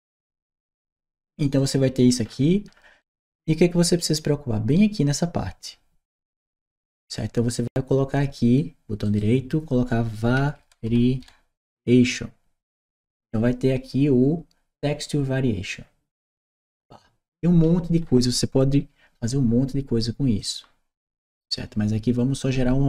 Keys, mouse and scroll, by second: 1.4 right click, 2.0 middle click, 2.5 middle click, 2.8-3.8 right drag, 8.8 right click, 16.0 click, 20.2 click.